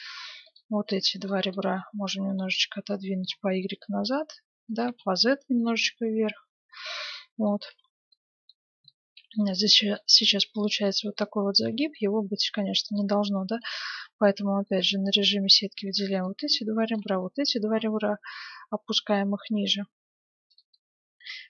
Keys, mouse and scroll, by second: 0.4-2.8 right drag, 1.5-3.3 middle drag, 2.2 g, 4.8 g, 7.0-9.7 middle drag, 7.6 Tab, 11.5 Tab, 13.4 middle click, 13.4 right click, 13.8 z, 15.1 z, 15.3-17.2 right drag, 17.2-18.9 middle drag, 17.6 g, 18.1 right click, 20.7-21.4 middle drag.